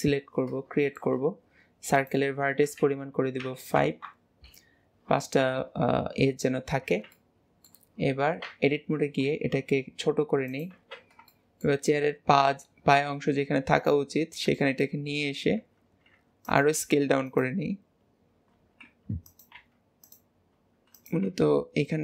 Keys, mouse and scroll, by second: 0.0-0.9 scroll down 5, 0.9-2.0 shift+middle drag, 2.0-5.1 drag, 6.8-7.2 scroll up 1, 7.2-8.5 shift+middle drag, 8.5 Tab, 11.4 shift+middle click, 12.0 scroll up 2, 12.4 g, 14.7 shift+middle click.